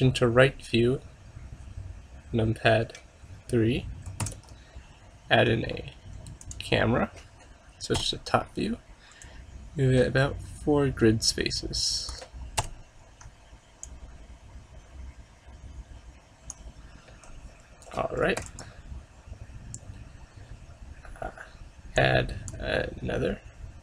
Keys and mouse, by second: 4.3 shift+a, 8.1 KP_7, 9.3-11.1 drag, 12.7 KP_5, 13.9-15.9 drag, 18.5 ctrl+s, 22.1-23.8 drag.